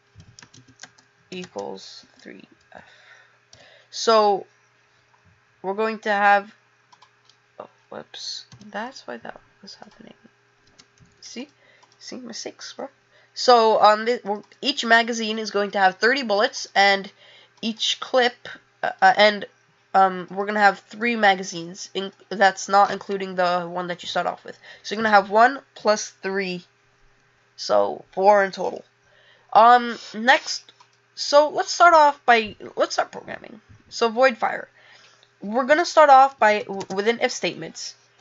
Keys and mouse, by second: 9.8 click, 30.7 click, 31.7 click.